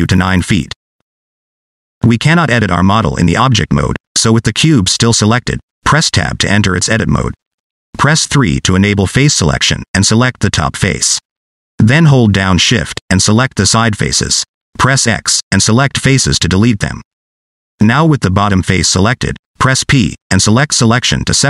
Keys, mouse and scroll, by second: 0.0 click, 6.3 Tab, 8.0 3, 9.8 click, 14.1 shift+click, 14.5 shift+click, 15.1 middle click, 15.5 scroll up 2, 15.7 middle click, 16.2 x, 18.2 click, 18.4 scroll down 1, 18.5 middle click, 19.4 p.